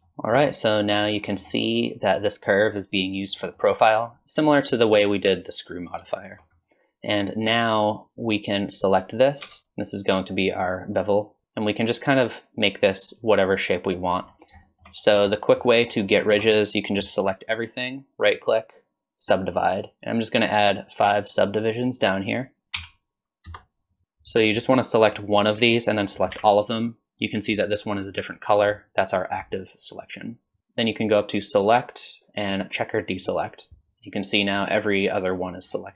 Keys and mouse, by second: 0.1 shift+drag, 1.2 click, 3.4 shift+middle drag, 6.2 shift+middle click, 7.6 click, 9.4 Tab, 11.6-14.1 drag, 14.7 shift+middle click, 15.4 middle click, 16.2 shift+middle click, 17.2 a, 18.5-19.6 drag, 22.7-24.0 drag, 26.3 a, 31.5-33.5 drag.